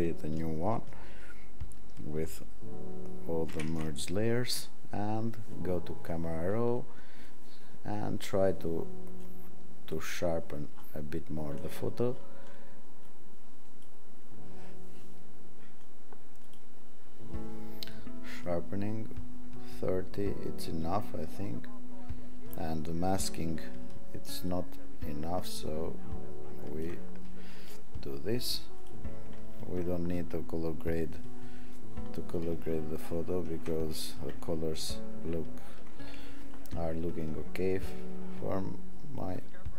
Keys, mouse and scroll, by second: 3.5 ctrl+shift+a, 26.9 alt+click, 29.7-30.6 alt+scroll down 18, 31.2 alt+scroll, 31.9 alt+scroll, 33.2 alt+scroll up 10, 33.8 alt+scroll, 34.6-35.6 alt+scroll, 37.6-37.9 alt+scroll down 12.